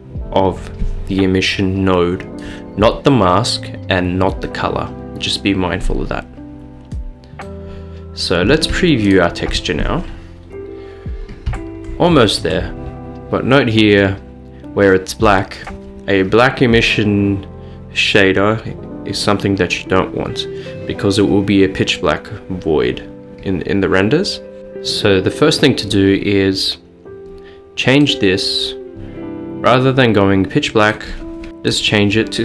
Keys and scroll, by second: 31.5 Return, 31.5 typing.